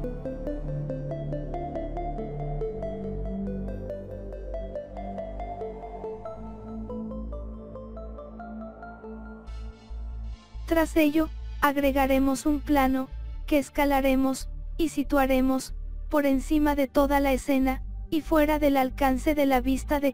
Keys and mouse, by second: 1.1-3.0 drag, 3.1-4.8 drag, 5.9-7.7 drag, 8.9 s, 11.7 click, 15.5 click, 16.3 click, 16.9 click, 17.4 KP_7, 18.6 click, 19.7 s.